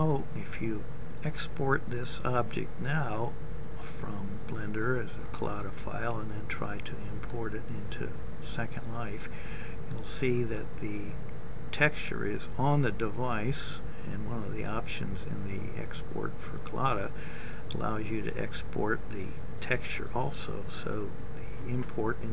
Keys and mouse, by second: 6.4-7.7 middle drag.